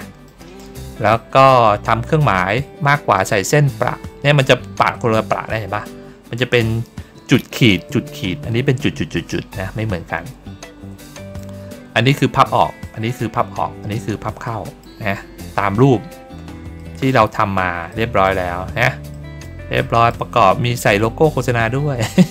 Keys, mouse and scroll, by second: 1.4 ctrl+middle click, 1.8 ctrl+middle click, 3.5 ctrl+middle click, 10.3 ctrl+middle click, 10.9 middle click, 14.3 middle click, 15.1 ctrl+middle click, 16.0 ctrl+middle click, 16.7 ctrl+middle click, 17.8 middle click, 19.0 middle click, 19.7 middle click, 20.6 ctrl+middle click, 21.6 ctrl+middle click.